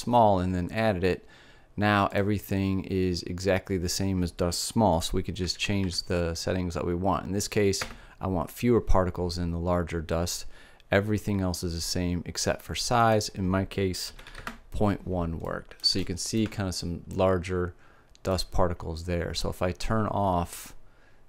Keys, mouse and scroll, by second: 2.7-6.4 drag, 6.4 KP_0, 10.9-13.4 middle drag, 13.4-15.4 drag, 16.1-21.2 middle drag.